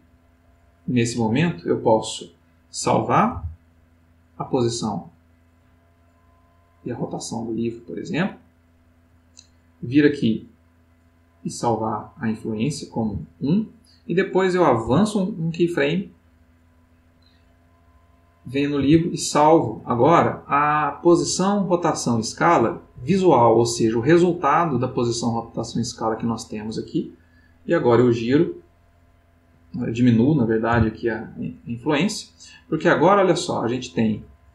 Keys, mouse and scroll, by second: 0.3 click, 3.3 i, 7.5 click, 11.5 right click, 13.0 i, 14.8 Right, 18.8 i, 25.6 click, 27.7-29.0 drag, 30.7 i, 32.8-34.5 drag.